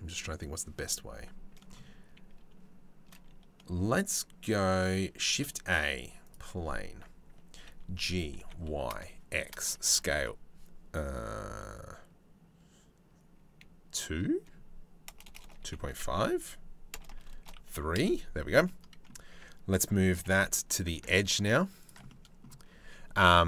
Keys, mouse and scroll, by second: 4.7 shift+a, 6.5 Tab, 7.2 g, 9.5 s, 18.3 middle click, 19.0 Tab, 19.8 g, 21.7 middle click.